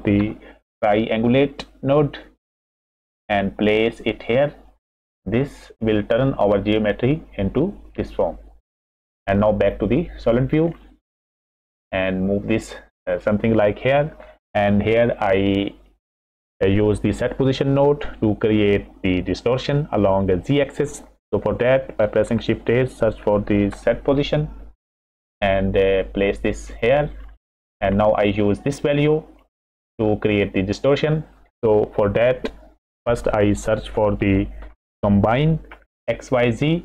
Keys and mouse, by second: 5.8 middle click, 8.1 middle click, 9.6-11.1 middle drag, 11.4 drag, 12.2 click, 13.2 middle click, 16.0 middle click, 22.2 shift+a, 26.1 click, 26.5 middle click, 27.5 middle click, 28.7-30.3 middle drag, 31.1 middle click, 33.9 shift+a.